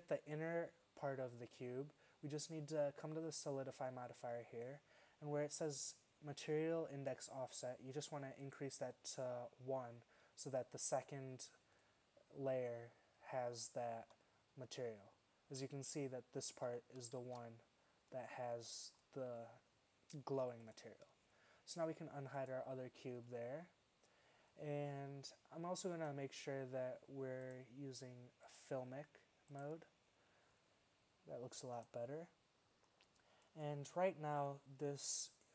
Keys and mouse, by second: 1.5-3.5 drag, 6.5-8.4 drag, 8.5 click, 13.7 middle click, 14.6 z, 16.6 z, 17.2 shift+z, 18.4 middle click, 32.8-33.9 middle drag.